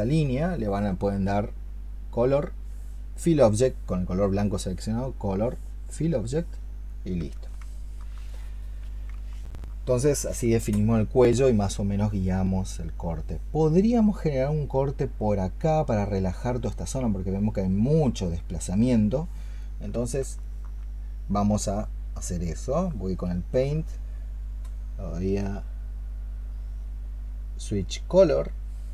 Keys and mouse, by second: 7.6 alt+click, 9.2 alt+click, 20.3 alt+click, 22.7 alt+click, 22.9 alt+click.